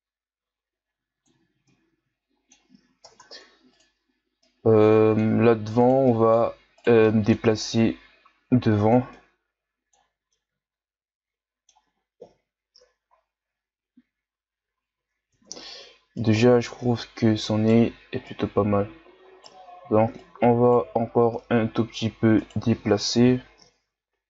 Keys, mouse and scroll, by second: 1.7-3.0 middle drag, 3.0 ctrl+Tab, 4.4-5.8 middle drag, 5.8 right click, 6.0 middle click, 6.8 shift+right click, 7.0 middle click, 7.8-9.1 drag, 9.1-12.2 middle drag, 12.2 KP_1, 12.7 Tab, 13.2-13.8 scroll down 4, 13.8-14.8 scroll down 1, 14.8-15.3 scroll up 7, 15.3 Tab, 16.2 right click, 18.2 right click, 21.4-22.4 middle drag, 22.4 right click, 23.2 KP_1.